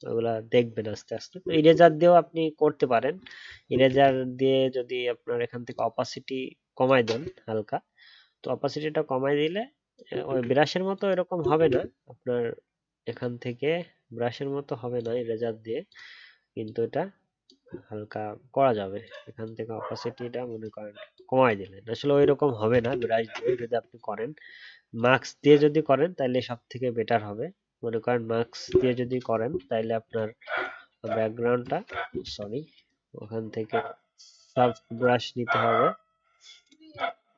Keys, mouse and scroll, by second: 10.2 ctrl+z, 11.6 ctrl+z, 22.7 ctrl+z, 22.9 ctrl+z, 23.4 ctrl+z, 32.2 ctrl+z.